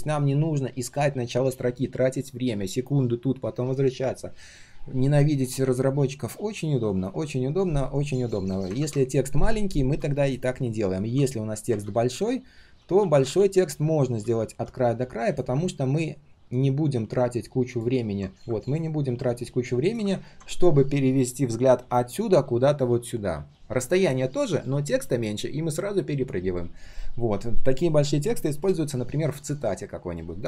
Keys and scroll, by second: 8.7 ctrl+w, 11.8 ctrl+z, 12.3 ctrl+z, 12.3 ctrl+z.